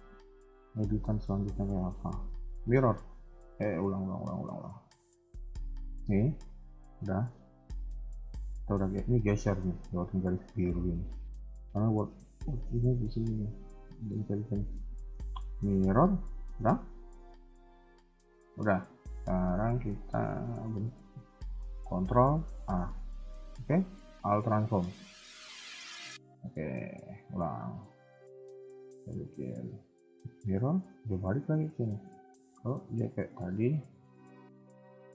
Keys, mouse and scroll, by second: 2.2-2.5 scroll down 2, 2.7 shift+middle click, 3.6 click, 6.7 g, 13.9 click, 19.4-19.8 scroll down 2, 19.9 shift+middle click, 20.5 scroll up 2, 22.4 ctrl+a, 25.0-26.9 scroll down 3, 26.9 click, 27.4-28.1 scroll up 2, 28.5 click, 31.8-32.4 scroll down 2, 32.6 ctrl+z, 35.0-35.1 scroll up 2.